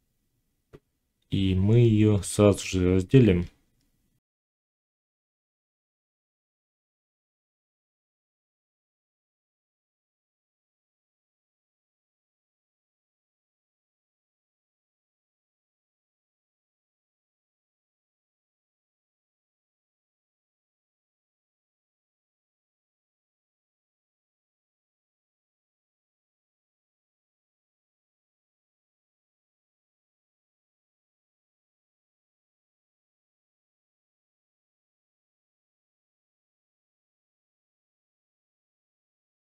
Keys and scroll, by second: 5.7 Tab, 8.0 g, 8.6 shift+Tab, 9.0 g, 9.4 x, 10.9 g, 11.5 x, 14.1 j, 19.7 j, 22.6 1, 25.5 ctrl+z, 28.8 shift+Tab, 32.1 ctrl+z, 32.9 x, 35.3 ctrl+z, 36.3 x.